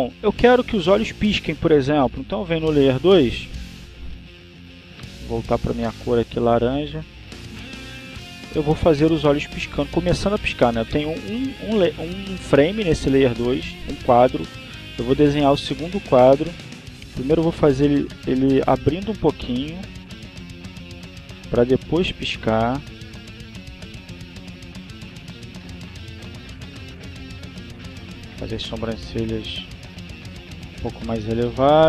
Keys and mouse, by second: 3.2 click, 5.2 click, 6.7 click, 7.4 click, 10.9 click, 14.7 click, 17.6-20.4 drag, 20.6-27.0 drag, 29.0-30.9 drag, 30.9-31.8 drag.